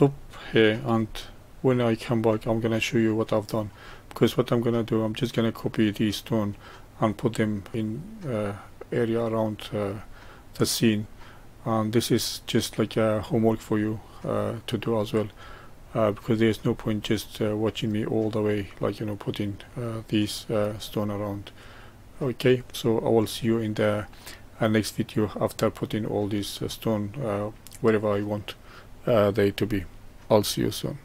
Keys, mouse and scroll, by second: 1.3-7.3 shift+middle drag, 9.9-13.1 middle drag, 13.8-19.8 middle drag, 20.8-26.4 middle drag.